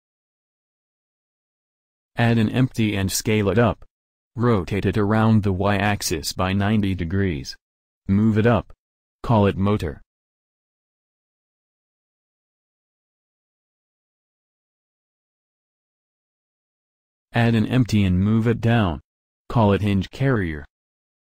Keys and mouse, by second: 3.1 shift+a, 4.8 s, 8.1 s, 9.6 r, 11.5 g, 14.5-16.3 drag, 18.0 shift+a, 20.1 s.